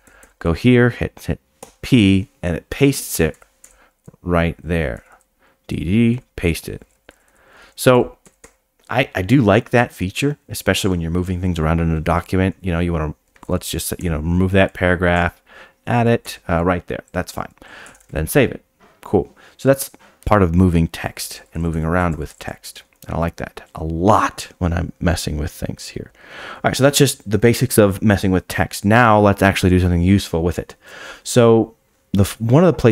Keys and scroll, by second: 1.6 p, 3.3 d, 4.9 d, 6.1 p, 7.1 d, 8.4 p, 13.3 shift+v, 14.0 d, 15.1 o, 16.2 p, 17.9 Escape.